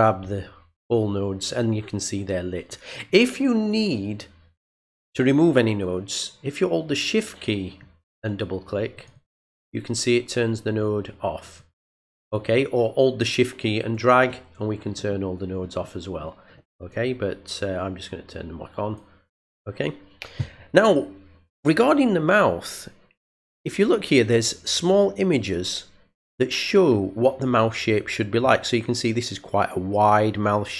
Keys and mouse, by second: 8.9 shift+click, 9.1 shift+click, 11.5 click, 11.7 click, 13.2 shift+click, 15.6-16.9 shift+drag, 17.5-18.9 drag.